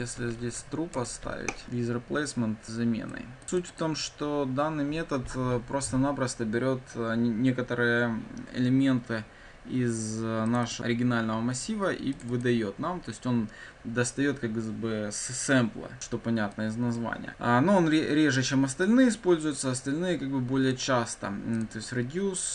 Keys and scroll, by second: 0.9 Return.